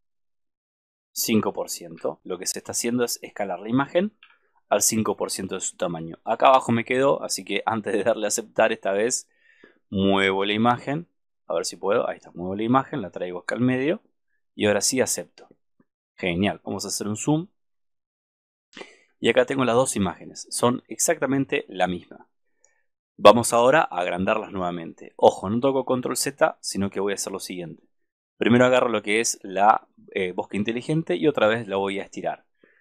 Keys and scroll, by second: 4.4 super+-.